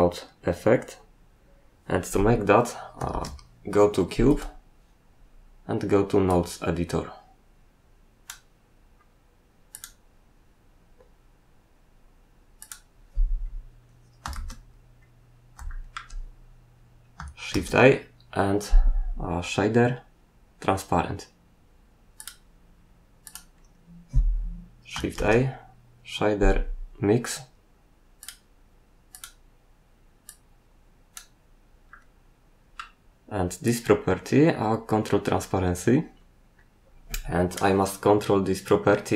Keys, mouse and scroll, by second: 3.1 shift+z, 4.3 right click, 4.4 double right click, 6.2 click, 9.7 click, 9.8 click, 12.6 click, 13.4-14.2 scroll up 1, 14.2 scroll up 1, 14.3 shift+z, 15.0 scroll up 1, 15.6 shift+middle click, 17.5 shift+a, 22.1 click, 23.2 click, 23.6-24.9 scroll up 3, 25.1 shift+a, 28.2 click, 29.1 click, 30.2 click, 31.9 middle click, 33.6 click.